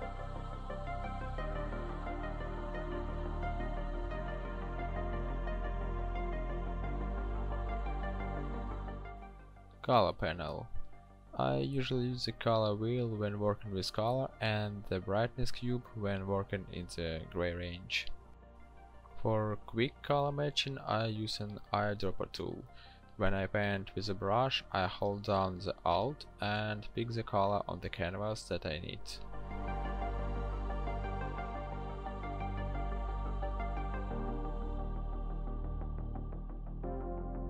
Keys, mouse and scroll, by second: 34.1 e.